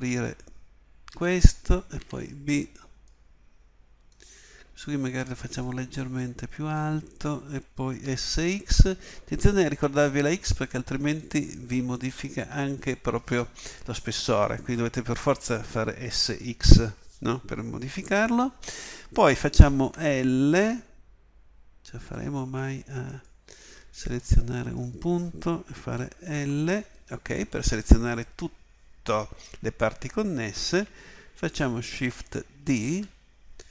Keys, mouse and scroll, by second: 1.2 a, 2.0 b, 6.7-8.1 drag, 8.1 s, 19.8 l, 20.5 l, 23.0 click, 26.3 l, 32.7 shift+d.